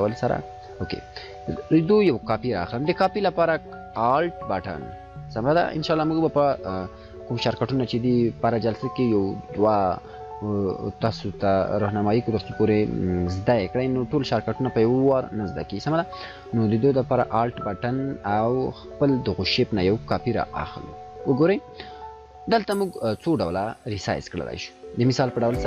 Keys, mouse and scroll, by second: 20.4-23.3 drag.